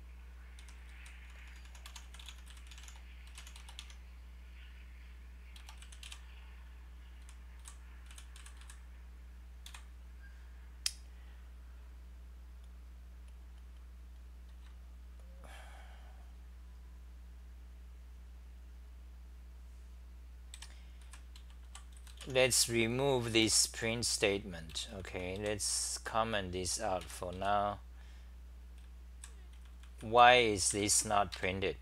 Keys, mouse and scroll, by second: 1.0-2.4 typing, 3.8 Home, 6.1 Delete, 7.8-9.6 typing, 14.5 ctrl+g, 16.8-19.9 scroll down 32, 20.5 3, 21.0 b, 21.7 p, 23.4 Return, 23.4-25.9 typing, 27.0-27.3 scroll, 27.1-31.3 typing, 31.3 ctrl+g.